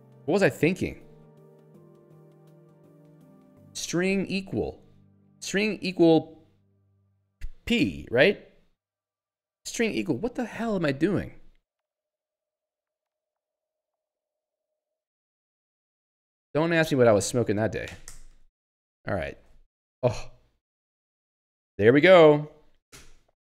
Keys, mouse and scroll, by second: 0.8 ctrl+s, 1.4 e, 1.7 u, 2.4 Return, 3.5-4.9 typing, 8.0 Return, 9.6 q, 10.4 Right, 12.0 BackSpace, 13.4-15.4 typing, 15.7 ctrl+s, 17.4 ctrl+c, 18.0 s.